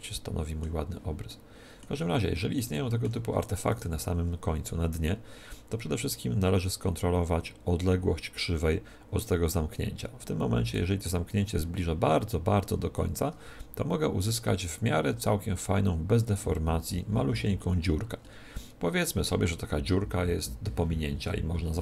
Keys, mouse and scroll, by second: 3.6-5.4 right drag, 6.1-7.9 drag, 11.0-12.8 middle drag, 12.8-14.7 drag, 16.5-21.8 middle drag.